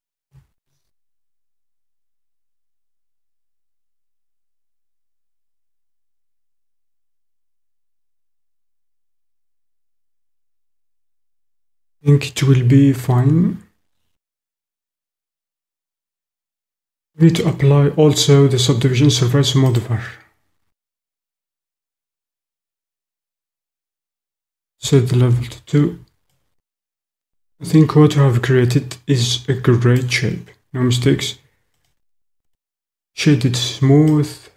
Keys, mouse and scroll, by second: 0.2 s, 2.2 click, 4.6 click, 5.5 click, 6.2 middle click, 6.4 click, 7.1 middle click, 7.2 click, 9.7-11.0 middle drag, 16.1-18.6 middle drag, 16.1-17.3 scroll up 1, 17.3-18.4 scroll up 1, 18.4 scroll up 1, 22.9 click, 25.4 Tab, 26.3 middle click, 28.8 middle click, 29.2 click, 29.3 middle click, 34.1 middle click.